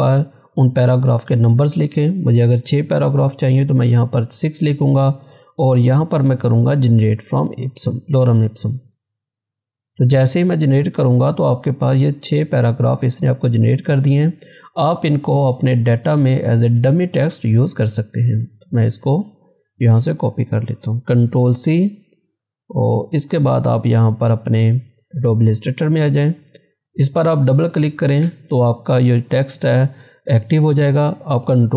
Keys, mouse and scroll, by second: 0.4 click, 3.0 6, 8.7 click, 11.2 scroll down 1, 12.8 scroll up 1, 14.1 scroll down 1, 16.4-21.3 drag, 21.3 ctrl+c, 23.7 click, 27.2 click, 31.5 click.